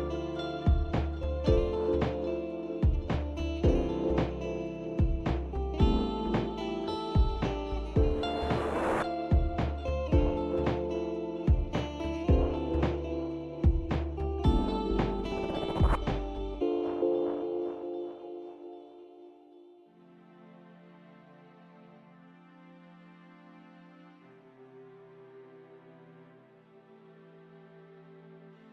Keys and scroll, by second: 1.6 alt+Tab, 7.5 Right, 11.1-11.9 typing, 12.3 Return, 28.1 typing.